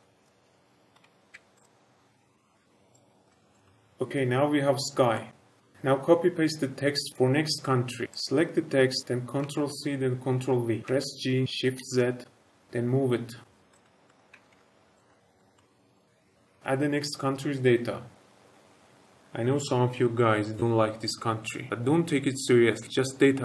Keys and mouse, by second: 2.0-2.5 middle drag, 2.9 click, 3.2 s, 3.5 click, 3.6-4.5 middle drag, 5.1-5.7 middle drag, 8.0 Delete, 8.1 click, 9.4 ctrl+c, 10.2 ctrl+v, 10.8 g, 11.7 shift+z, 13.7 click, 13.8 shift+middle click, 14.0 shift+middle click, 14.3 g, 14.5 shift+z, 15.0 shift+middle drag, 15.3 middle drag, 15.5 shift+middle click, 15.9 click, 16.4 Tab.